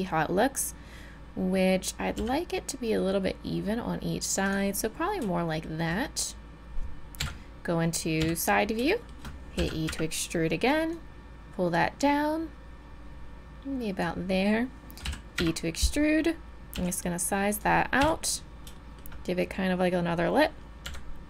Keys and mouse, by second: 2.2 s, 5.4 click, 7.2 KP_3, 7.2 KP_2, 8.2 KP_3, 9.6 e, 15.0 e, 16.7 s, 18.0 KP_7, 20.8 KP_3.